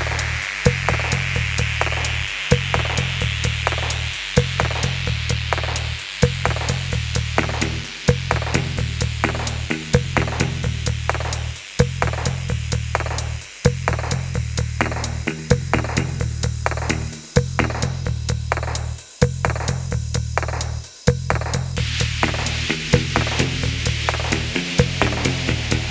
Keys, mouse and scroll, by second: 1.9 middle click, 2.5 shift+scroll down 2, 2.7 middle click, 3.7-4.7 scroll up 1, 4.4-5.3 typing, 6.9-7.3 scroll down 1, 7.0-7.8 typing, 8.4 middle click, 11.3-11.9 scroll up 1, 11.9 middle click, 13.7 shift+middle click, 15.7-16.2 scroll down 1, 16.2 scroll down 1, 16.3-17.8 scroll up 1, 19.3 shift+middle click, 21.9 middle click, 23.8 middle click, 24.2 alt+click, 25.8-25.9 typing.